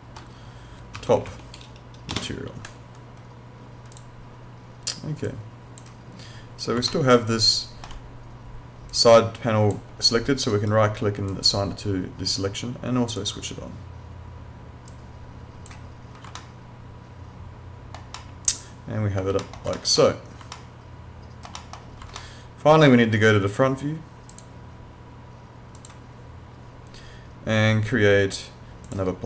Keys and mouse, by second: 1.0 t, 1.1 o, 1.3 p, 3.9 click, 6.9 alt+middle click, 8.9 click, 10.5 right click, 11.3 click, 16.4 alt+middle click, 19.7 alt+middle click, 20.6 alt+middle click, 22.2 alt+middle click, 24.3 click, 28.8 click.